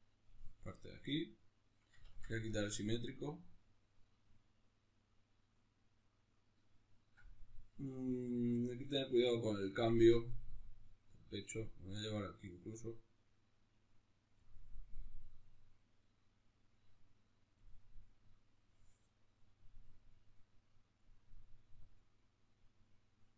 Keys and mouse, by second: 0.0-2.3 drag, 1.8 ctrl+z, 9.5-23.3 drag.